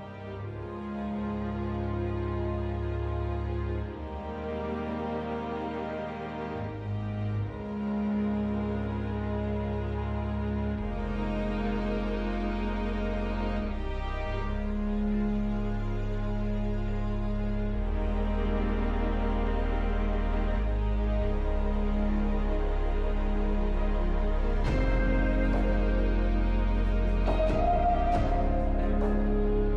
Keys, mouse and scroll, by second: 2.8 scroll down 1, 3.6-4.1 scroll down 3, 4.2-4.7 scroll down 1, 4.7-5.2 scroll down 1, 5.2-5.9 scroll down 1, 5.9-6.9 scroll down 2, 6.9-7.3 scroll down 2, 7.3-8.5 scroll up 2, 8.5-10.1 scroll up 1, 10.1-11.0 scroll up 1, 11.0-11.5 scroll up 2, 11.5-11.9 scroll up 1, 11.9-13.9 scroll down 1, 13.9-16.3 scroll down 1, 16.3-17.1 scroll up 1, 17.1 F4, 17.6 middle click, 21.0 w, 25.9 r.